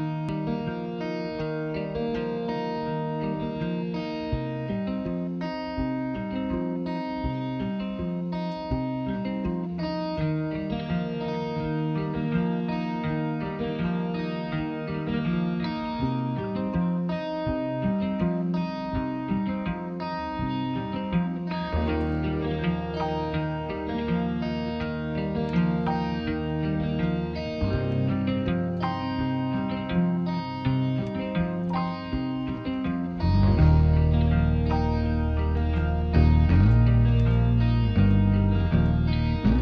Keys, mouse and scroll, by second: 5.9 Tab, 7.6 click, 9.3 shift+click, 12.4 Tab, 16.2 shift+click, 18.4 ctrl+p, 26.2 click, 27.5 g, 30.7 click, 32.1 r.